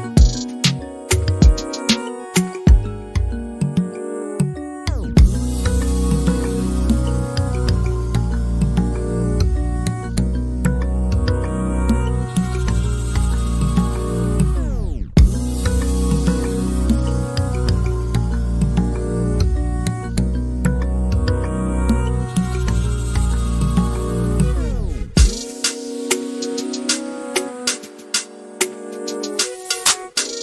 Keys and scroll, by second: 22.1-23.4 typing.